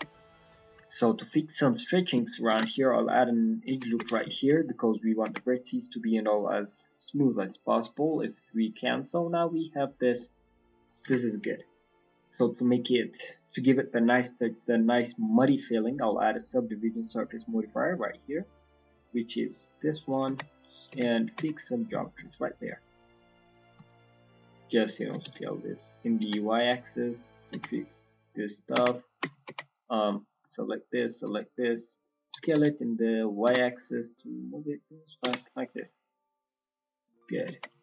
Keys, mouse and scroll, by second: 0.1 middle click, 0.4 middle click, 0.8 shift+middle click, 1.0-1.3 scroll up 4, 1.3 middle click, 2.6 ctrl+r, 4.6 alt+middle click, 5.2 Tab, 5.4 middle click, 6.4 middle click, 7.1 scroll down 5, 7.4 middle click, 7.9 shift+scroll down 1, 8.0 shift+middle click, 8.4 middle click, 9.4-9.8 scroll down 2, 9.7 middle click, 10.1 middle click, 11.8 click, 12.2 scroll down 2, 13.1 click, 14.9 middle click, 16.7-17.4 scroll up 1, 17.4-17.7 scroll up 3, 17.9 scroll down 1, 18.0 scroll down 2, 18.2 scroll up 3, 19.8 middle click, 19.9 scroll down 2, 20.9 Tab, 21.0 middle click, 22.0 alt+click, 22.4 middle click, 22.8 click, 23.3 middle click, 24.2 shift+click, 24.6 middle click, 25.0 s, 27.6 Tab, 27.8 middle click, 28.7 Tab, 28.8 middle click, 29.2 Tab, 29.4 Tab, 29.6 click, 29.9 middle click, 31.2 shift+click, 31.3 middle click, 31.9 middle click, 32.3 s, 35.2 Tab, 35.4 middle click, 36.4 middle click, 37.0 middle click, 37.3-37.8 scroll up 3, 37.4 Tab.